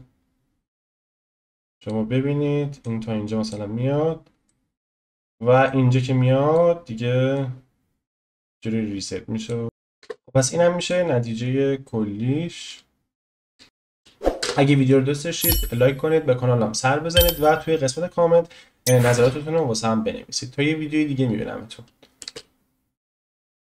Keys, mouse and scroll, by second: 1.2-2.8 drag, 4.0-4.4 scroll down 1, 4.4-5.6 shift+middle drag, 5.6-7.4 drag, 9.6 click, 10.0 space, 10.8 click, 13.5 space, 13.6 shift+middle click, 14.4 space, 22.2 space.